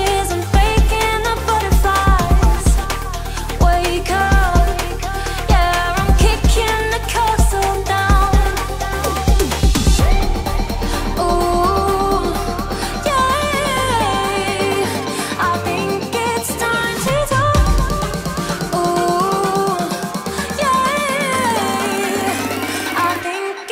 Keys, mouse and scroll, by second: 0.8-5.2 alt+drag, 5.2-13.1 drag, 13.1 Left, 13.3 Up, 17.4-23.7 drag.